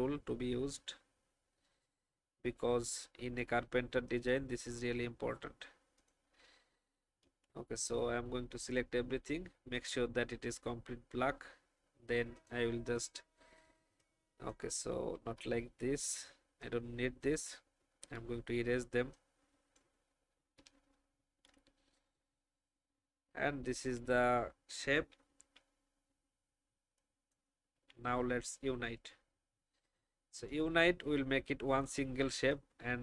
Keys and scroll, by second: 7.2 ctrl+a, 15.3 Delete, 18.0 Delete, 21.3 ctrl+a, 24.9 shift+e, 27.9 v.